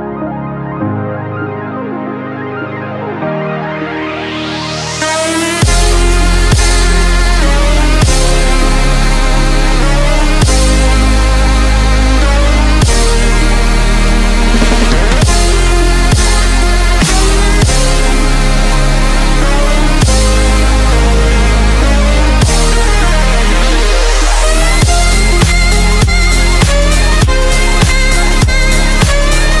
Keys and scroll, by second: 0.2 x, 1.5 z, 4.0 x, 5.8 space, 6.1 x, 8.8 space, 9.1 x, 11.7 space, 12.0 x, 16.4 space, 16.9 x, 19.1 ctrl+z, 21.7 z, 24.1 x, 28.1 x.